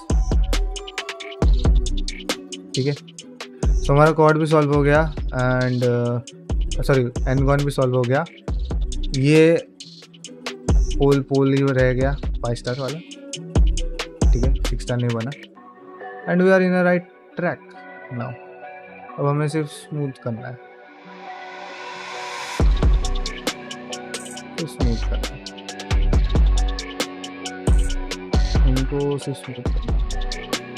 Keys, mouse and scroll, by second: 0.3-2.5 middle drag, 2.8 shift+middle click, 3.1 ctrl+middle click, 3.5 middle click, 4.6 middle click, 5.8 click, 6.1 g, 7.2 click, 7.4 g, 7.9 middle click, 8.8 middle click, 9.8 middle click, 10.6 g, 12.6 middle click, 13.2 click, 13.4 g, 13.9 middle click, 14.3 g, 14.9 click, 15.0 g, 15.3 middle click, 15.8 middle click, 16.9 click, 17.2 g, 17.8 click, 18.0 g, 18.5 q, 19.6 q, 19.7 ctrl+Tab, 20.6-22.8 shift+drag, 23.3 shift+middle click, 23.6-26.3 shift+drag, 26.6 middle click, 26.9-29.3 shift+drag, 29.4 middle click, 30.0 middle click, 30.3 shift+middle click, 30.5 middle click.